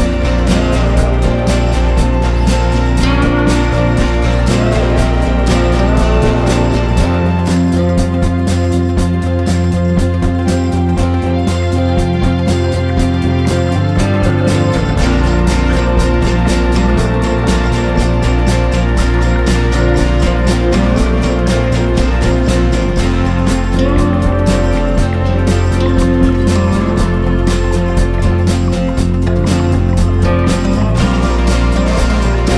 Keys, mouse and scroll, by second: 0.3 scroll down 4, 1.0-1.3 scroll up 1, 2.2 ctrl+click, 5.1 scroll down 1, 6.0 shift+click, 8.1 scroll up 1, 8.3-8.6 scroll down 1, 8.9 shift+click, 11.1-11.5 scroll up 4, 11.8-12.6 scroll down 5, 12.3 middle click, 12.6 scroll up 3, 13.5 middle click, 14.2 scroll down 2, 14.5 middle click, 14.7 scroll up 1, 15.1 middle click, 15.9 scroll down 1, 16.0 middle click, 16.6 middle click, 17.3 scroll up 2, 17.7 scroll down 1, 20.2 click, 21.3 click, 23.4 Tab, 23.9 shift+z, 24.7 scroll down 2, 24.8 middle click, 26.3 shift+a, 28.6 Tab, 29.1 s, 30.5 s.